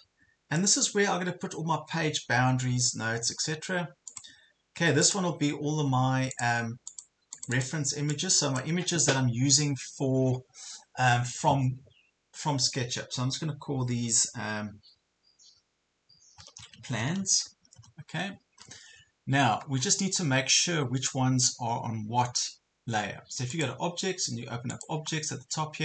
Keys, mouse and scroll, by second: 0.6 click, 5.1 right click, 6.3 click, 16.2-17.7 typing, 17.8 Return, 23.6-25.8 drag.